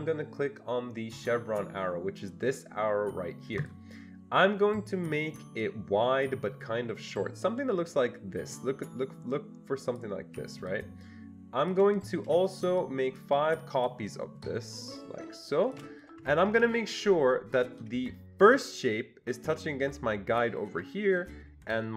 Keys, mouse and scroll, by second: 3.6 click, 5.6-10.7 drag, 10.7-12.8 shift+drag, 12.8-16.5 ctrl+shift+drag, 16.2 Escape, 16.4 Escape, 16.5 Escape, 18.5 click.